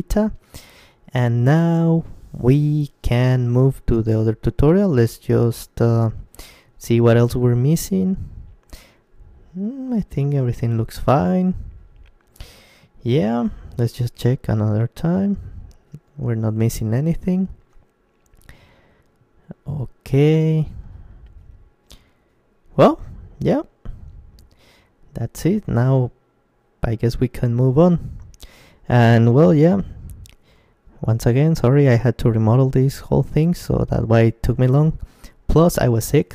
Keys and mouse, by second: 1.6 KP_5, 2.7-8.2 middle drag, 3.8 KP_Decimal, 7.7 shift+c, 8.7 middle click, 9.5-13.7 middle drag, 16.2-20.5 middle drag.